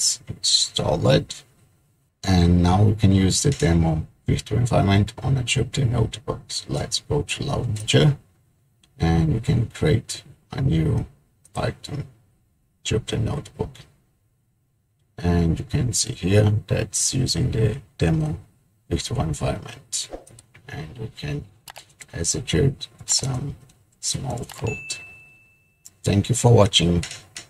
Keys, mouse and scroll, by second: 7.8 click, 12.0 click, 20.3 click, 21.0 click, 26.8 shift+Return, 26.8 typing.